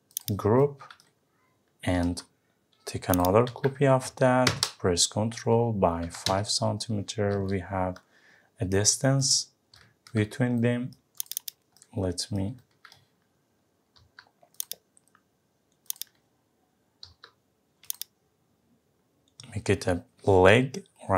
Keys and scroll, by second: 3.5 Up, 6.3 Return.